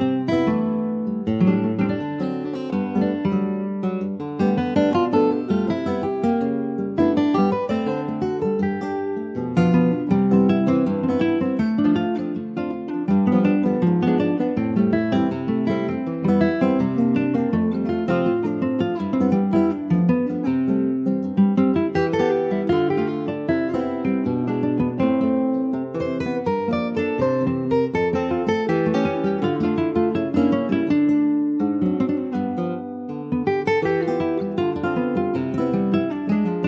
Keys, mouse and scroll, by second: 0.2 middle click, 1.1-5.2 drag, 5.2 middle click, 5.7 ctrl+s, 6.2 click, 9.7 click, 10.1 middle click, 10.4 scroll down 2, 10.7 middle click, 11.2 ctrl+s, 11.3 click, 11.5 scroll down 3, 11.7 shift+middle click, 12.3 click, 12.7-14.4 middle drag, 14.4 ctrl+s, 14.6 click, 15.1 shift+middle click, 15.8 ctrl+s, 15.9 click, 16.2 shift+middle click, 17.0 ctrl+s, 17.1 click, 17.8 /, 18.2 middle click, 18.9 ctrl+s, 19.0 ctrl+click, 19.2-19.6 scroll up 2, 19.6 middle click, 20.0 Tab, 20.5 shift+middle click, 20.7 click, 21.3-22.5 middle drag, 22.5 3, 24.0 click, 24.9 /, 25.1 click, 25.4-25.9 scroll down 1, 25.9 ctrl+click, 26.1 scroll down 1, 26.4 middle click, 27.2 ctrl+s, 27.2-28.5 middle drag, 28.5 ctrl+s, 28.5 click, 29.0 shift+s, 30.4 shift+a, 32.2 alt+middle click, 32.8 ctrl+s, 33.9 ctrl+z, 34.8 Tab, 35.1 click, 35.6-36.6 middle drag.